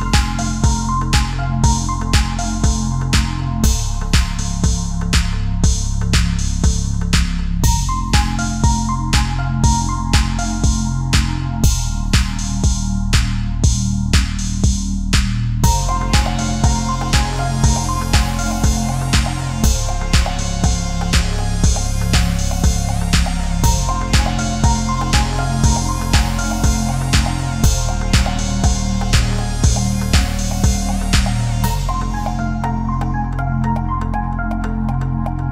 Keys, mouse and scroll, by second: 0.4 click, 2.0-2.3 scroll down 1, 5.6 middle click, 7.2 l, 8.8 x, 9.2-10.8 scroll down 1, 20.6 scroll down 1, 21.0 scroll up 1, 22.0 middle click, 23.4 scroll down 1.